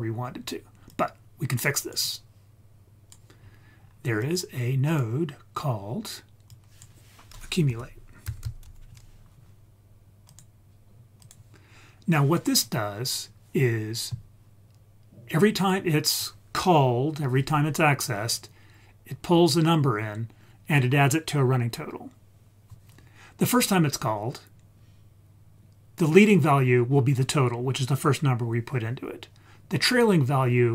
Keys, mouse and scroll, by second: 0.4 scroll down 2, 0.9-3.2 drag, 3.4 scroll down 2, 3.7 scroll up 3, 4.2 click, 4.9 click, 6.5-10.4 drag, 8.4 c, 11.2 click, 12.0-12.6 scroll up 2, 12.6-13.3 scroll down 1, 13.3-14.3 scroll up 3.